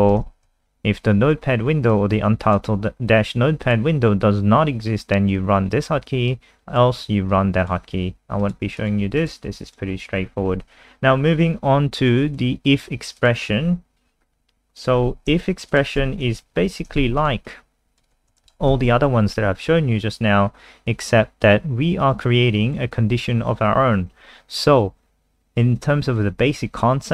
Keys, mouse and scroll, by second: 0.3 ctrl+v, 0.5 ctrl+s, 1.9 click, 8.8 click, 9.2 click, 10.1-11.1 scroll down 3, 12.4 click, 13.5-14.1 scroll down 4, 14.8 click, 15.0-15.7 scroll up 1, 15.7 shift+click, 16.5 shift+Up, 17.0 shift+Right, 17.0 ctrl+c, 17.2 click, 17.5 click, 18.3 BackSpace, 18.5 ctrl+v, 18.7 ctrl+s, 22.2 click.